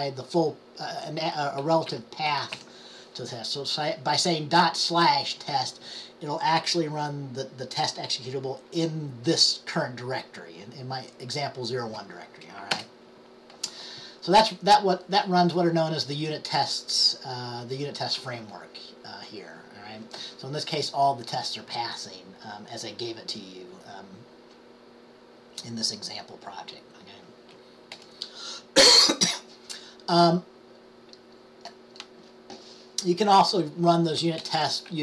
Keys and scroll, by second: 0.0 typing, 1.5-3.2 typing.